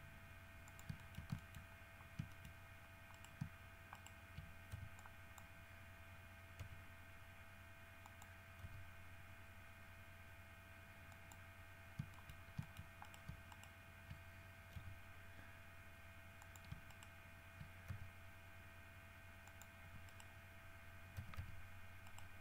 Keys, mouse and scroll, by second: 0.9 shift+click, 1.2 shift+middle click, 1.8 shift+middle click, 2.3 scroll down 1, 2.5 shift+middle click, 2.7 shift+scroll up 1, 3.4 shift+right click, 4.2 shift+right click, 5.0 shift+b, 5.2 shift+click, 6.8 r, 8.3 click, 8.8 g, 11.4 middle click, 12.1 scroll down 2, 12.4 shift+middle click, 12.8 shift+middle click, 13.3 shift+right click, 13.7 shift+right click, 15.0 g, 16.6 shift+click, 17.1 shift+right click, 18.1 shift+g, 19.7 click, 20.3 right click, 21.4 g, 22.3 right click.